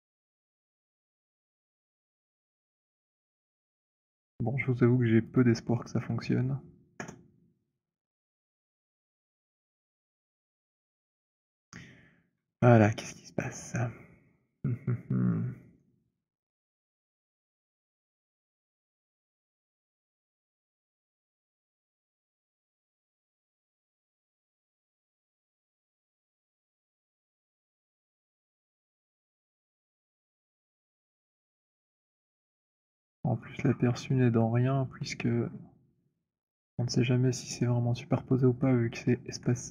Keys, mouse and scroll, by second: 0.4 alt+middle click, 1.3 alt+click, 3.2 click, 5.3 click, 6.7 Return, 8.6 click, 10.3 click, 12.4 w, 13.5 alt+click, 14.2 scroll, 15.0 middle click, 15.6 alt+middle click, 15.9 alt+middle click, 16.4 alt+middle click, 17.0 alt+middle click, 17.8 click, 20.9 right click, 21.4 middle click, 21.6 middle click, 22.9 click, 23.8 alt+click, 24.8 f, 25.9 middle click, 27.7 alt+click, 28.9-32.0 typing, 29.4 scroll, 32.0-34.3 middle click, 32.2-32.8 scroll, 33.1-34.2 scroll, 34.6 alt+middle click, 35.1 alt+middle click, 35.8 alt+middle click, 36.5 alt+middle click, 36.9 alt+middle click, 37.4 alt+middle click, 37.8 alt+middle click, 38.8 alt+middle click, 39.2 alt+middle click.